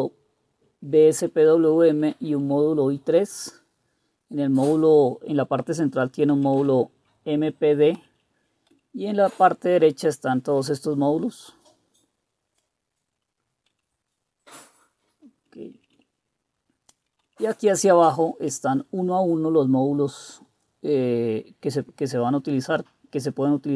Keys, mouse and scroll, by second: 0.1 Right, 0.2 Right, 0.9 Right, 1.2 Right, 1.4 Right, 1.6 Right, 1.7 Right, 1.9 Right, 2.3 Right, 5.7 Down, 6.3 Left, 6.6 Left, 7.9 Down, 8.7 Left, 9.7 Right, 10.3 Right, 10.4 Right, 10.5 Right, 13.7 Left, 14.3-15.0 Left, 15.5 Down, 15.7 Down, 15.9 Down, 16.6-17.0 Down, 17.3-18.4 Down.